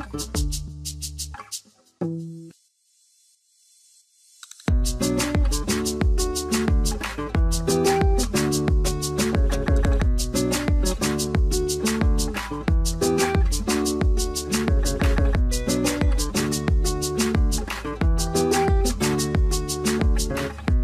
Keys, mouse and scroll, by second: 9.9 scroll down 1, 10.7 ctrl+a, 11.0 right click.